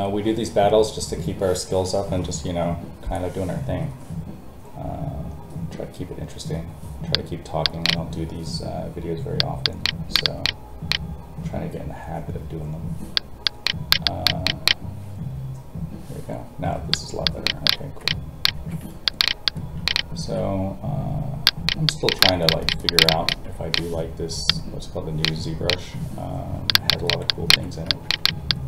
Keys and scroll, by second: 18.5 alt+a, 20.2 alt+a.